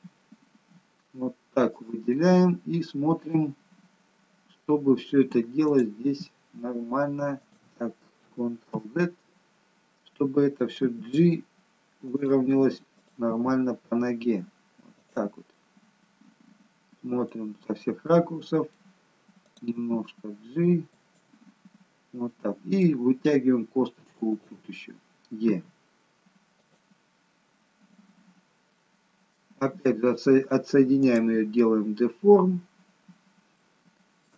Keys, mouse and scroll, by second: 0.0 e, 2.1 middle click, 3.7-5.0 scroll up 2, 5.8 click, 6.1 e, 8.7 ctrl+z, 10.9 g, 13.3 click, 13.9 g, 15.5 middle click, 17.6-18.1 scroll down 2, 18.1 middle click, 19.5 click, 19.9 g, 22.0-22.4 scroll down 2, 22.4 middle click, 23.4-24.0 scroll up 2, 24.4 click, 25.6 e, 27.1 scroll down 2, 28.3 scroll down 3, 28.8 middle click, 31.1 click, 32.1 scroll up 5, 32.8-33.3 scroll down 1, 33.6 shift+middle click.